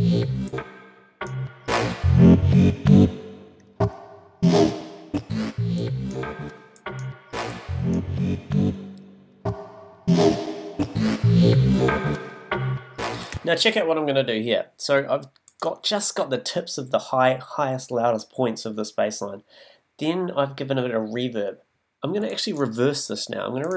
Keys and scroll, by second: 13.2 space.